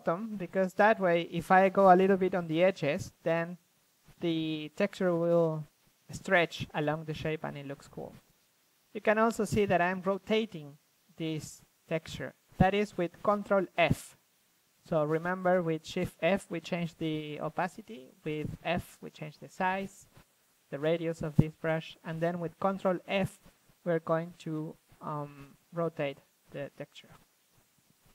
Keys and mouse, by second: 2.5 ctrl+f, 2.5-3.0 drag, 3.3 click, 4.6 f, 4.9 click, 6.3-8.4 drag, 8.4 ctrl+f, 9.2 shift+f, 10.7 drag, 11.4 ctrl+f, 11.4 drag, 12.7 ctrl+f, 15.0 click, 15.1 ctrl+f, 17.5-19.5 drag, 19.5-20.9 middle drag, 20.9-25.1 drag, 22.1 ctrl+f, 25.1 middle click, 27.7 f, 27.9-28.1 drag.